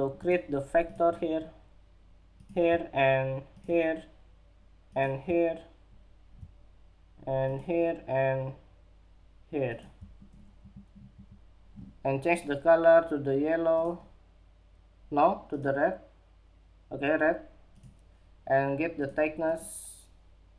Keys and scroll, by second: 9.8 Escape, 10.6 Escape.